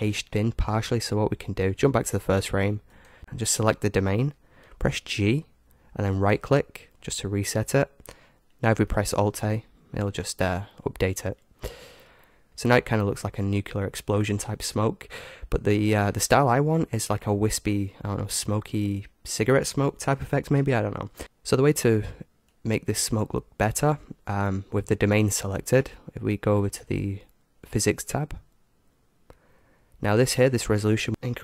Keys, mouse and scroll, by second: 1.9-3.2 drag, 2.9-4.2 right drag, 5.0 g, 8.7 alt+a, 13.1-14.8 middle drag, 14.8-16.2 scroll up 1, 16.2 middle click, 17.3-21.2 drag, 22.5-24.4 drag, 27.6-29.5 drag, 28.5-31.1 middle drag, 31.1-31.4 drag.